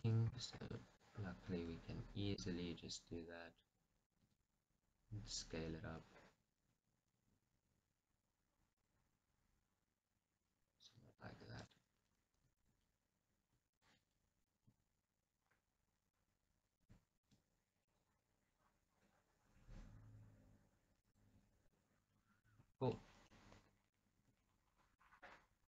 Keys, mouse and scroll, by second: 0.7-1.8 alt+shift+drag, 2.5-9.1 middle drag, 4.3 s, 9.1 click, 9.3-11.8 middle drag, 11.8 alt+click, 12.7-14.0 alt+drag, 14.9 s, 17.0 click, 17.2 s, 21.3 click, 21.6 scroll, 21.8-24.5 middle drag, 24.5 Tab, 24.7 scroll down 1.